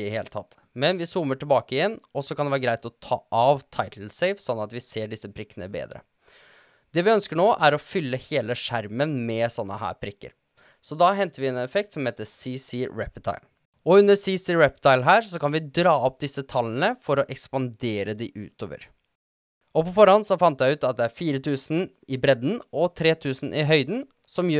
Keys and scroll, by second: 12.5-13.5 typing, 19.7-24.5 typing.